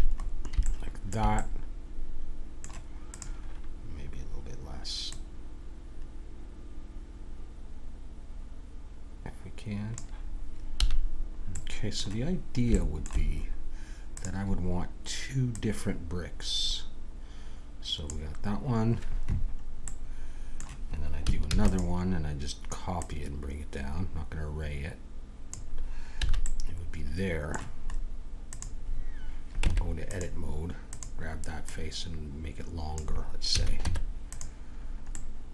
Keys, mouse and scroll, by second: 0.2-1.7 middle drag, 3.1-4.9 drag, 5.1-6.9 drag, 10.7 a, 11.1-13.0 middle drag, 14.1-17.2 drag, 20.0-21.4 middle drag, 21.4 shift+d, 22.9-25.0 drag, 26.2 a, 26.4-28.5 middle drag, 28.5-33.4 drag, 29.6 Tab, 33.5 a, 33.8 Tab, 34.7-35.5 middle drag.